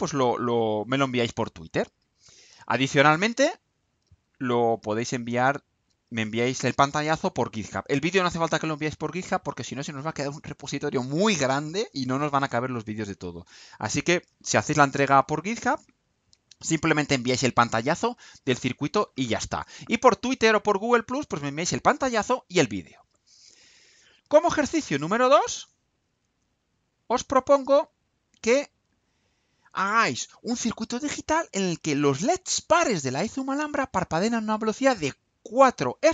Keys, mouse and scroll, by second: 28.2 click.